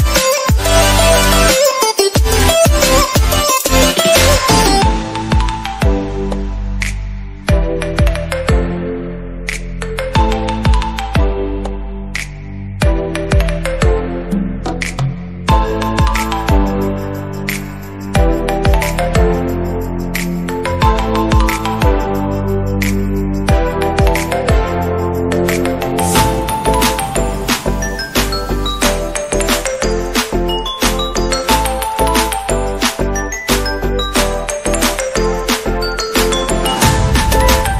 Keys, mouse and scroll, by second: 1.6 click, 1.8-2.3 typing, 1.9 ctrl+click, 2.4-6.8 drag, 6.8-11.6 typing, 6.8 alt+click, 8.0 click, 8.6 click, 9.1 ctrl+d, 9.5 ctrl+click, 9.8 alt+click, 10.7 click, 14.2 space, 15.6 space, 15.6 click, 16.1 space, 16.2 click, 16.6 click, 17.2 space, 17.7 click, 18.3 space, 18.4 click, 20.0 space, 20.0 click, 20.6 click, 21.1 space, 22.2 space, 23.1 space, 24.0 space, 24.2 click, 25.5 ], 25.6 click, 25.9 space, 25.9 alt+click, 27.7 [, 29.2 right click, 29.3 click, 29.5 space, 29.7 ctrl+click, 29.8 space, 30.0 ctrl+click, 30.5 ], 30.7 click, 30.9 space, 31.0-33.4 alt+drag, 33.9-34.4 typing, 34.1 click, 34.3 alt+click, 34.5-37.1 drag, 37.3 space, 37.4 click, 37.4 space, 37.6-37.7 drag.